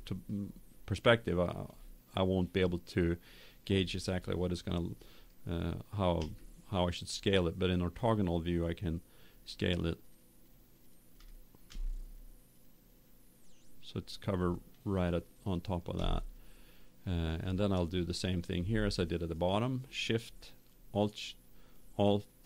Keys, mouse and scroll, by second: 6.1 KP_5, 8.6-11.5 middle drag, 11.6 s, 16.2-17.9 middle drag, 18.1-20.9 right drag.